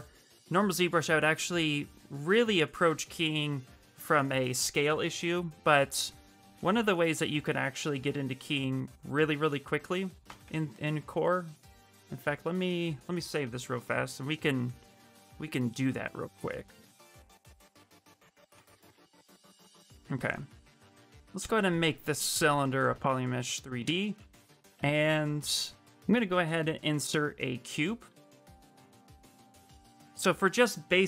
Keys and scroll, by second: 10.0 q, 15.0 Return, 16.0 Return, 28.0 w.